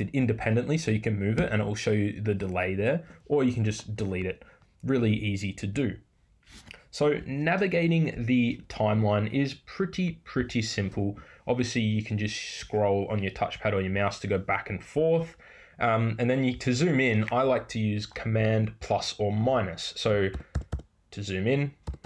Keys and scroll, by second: 3.6 BackSpace.